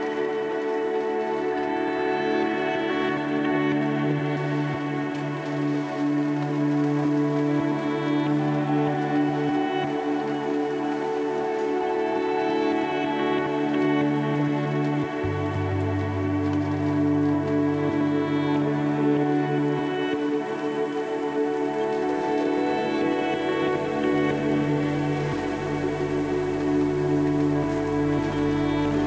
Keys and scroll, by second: 1.4 m, 3.7 ctrl+j, 10.6 Delete, 13.1 v, 27.8 1.